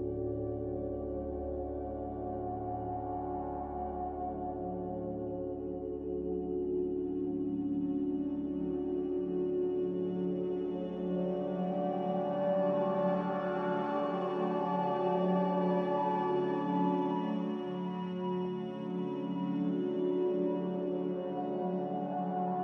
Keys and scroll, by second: 0.7-1.5 typing, 4.4-5.2 typing, 5.7 ctrl+z, 11.7 5, 12.1-12.5 Return, 14.5 Return.